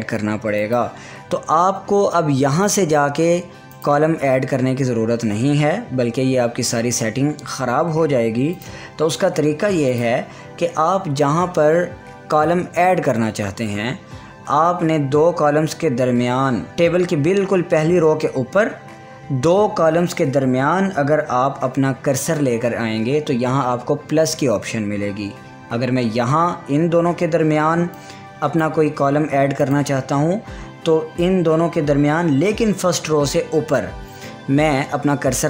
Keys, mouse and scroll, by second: 1.2 click, 3.2 click, 9.1 click, 28.5-30.2 drag.